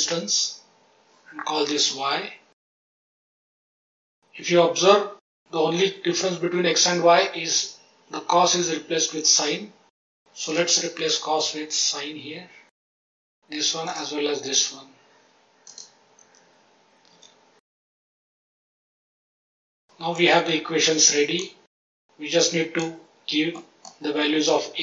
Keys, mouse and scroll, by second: 1.4 F2, 3.2 Tab, 3.6 middle click, 10.4-12.7 drag, 13.8-15.8 drag, 17.1 Tab, 17.9 middle click, 18.3 click, 18.7 click, 19.1 click, 19.5 click, 19.8 middle click, 20.8-21.4 drag, 21.8-22.8 drag, 23.5 middle click.